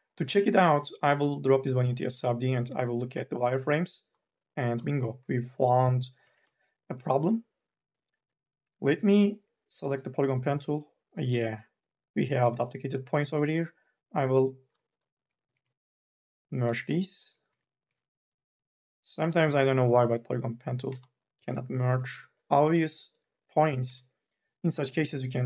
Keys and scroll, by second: 6.0 1, 6.3 e, 7.7 q, 8.0 1, 11.4 ctrl+z, 12.5 ctrl+z, 15.6 ctrl+z, 17.7 ctrl+z, 22.8 ctrl+z, 24.0 ctrl+z, 24.5 KP_0.